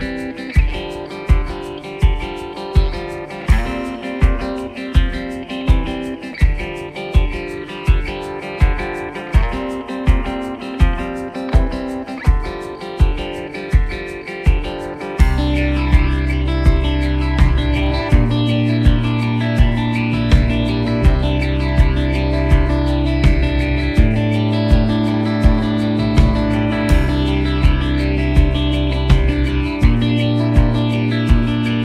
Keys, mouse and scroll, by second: 1.3 alt+scroll, 1.3 alt+scroll up 1, 2.6 v, 3.4 ctrl+click, 4.1 alt+click, 5.2 alt+click, 6.3 alt+click, 10.1 alt+w, 10.2-10.5 alt+scroll down 1, 11.0-11.3 alt+scroll down 1, 11.5 alt+scroll, 11.6-12.0 alt+scroll down 1, 12.0-12.3 alt+scroll up 1, 12.4-12.8 alt+scroll down 1, 14.9 alt+scroll down 1, 16.6 alt+scroll up 1, 17.7-18.0 scroll down 1, 23.2-23.6 scroll down 1, 28.1 o, 29.0 ctrl+z, 30.9 ctrl+z.